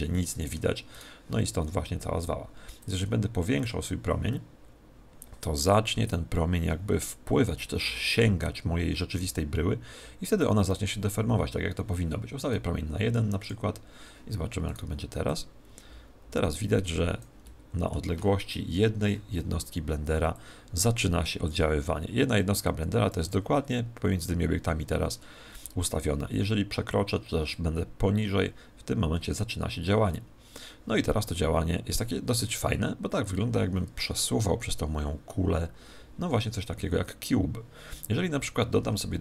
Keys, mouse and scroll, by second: 0.8 right click, 2.8 click, 13.4-17.2 drag, 14.6 right click, 17.4-18.6 middle drag, 18.6 KP_1, 20.2 click, 27.4 click, 38.8 shift+a.